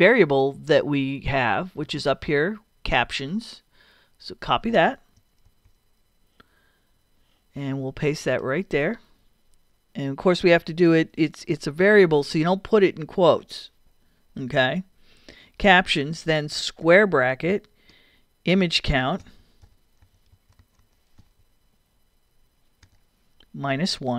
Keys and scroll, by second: 5.5 super+c, 11.8 super+v, 16.8 [, 17.9-21.7 typing, 22.8 t, 24.0 -.